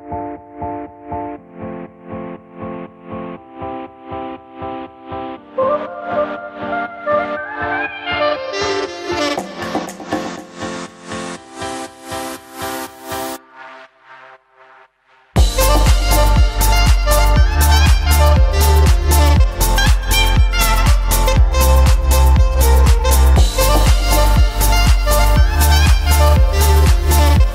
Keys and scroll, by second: 0.5 ctrl+-, 19.7 ctrl++, 21.4 ctrl+-.